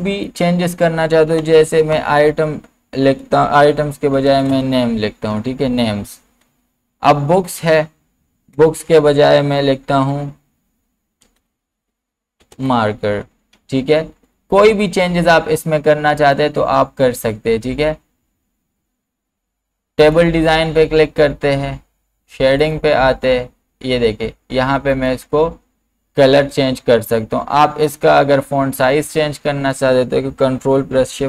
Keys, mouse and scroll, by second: 0.2 click, 1.4 BackSpace, 3.9-5.0 typing, 6.1-6.8 typing, 7.6 click, 8.6 BackSpace, 11.1-13.2 typing, 16.4-20.0 drag, 22.6 click, 24.9 click, 28.2 click, 28.2-31.2 drag.